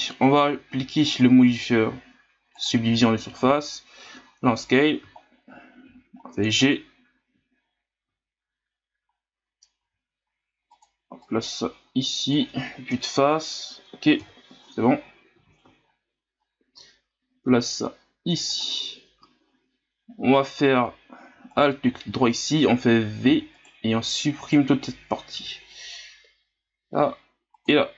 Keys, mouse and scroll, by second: 1.0-3.3 drag, 3.3 Tab, 4.0 s, 5.1-5.6 scroll up 2, 5.8 g, 7.5 scroll down 2, 8.3-9.8 scroll up 5, 9.8 s, 11.2-12.9 drag, 12.9 KP_1, 14.2 KP_3, 15.4 z, 15.8 scroll up 5, 16.8 s, 21.5 alt+right click, 23.3 v, 24.4 right click, 25.3 l, 26.5 Delete.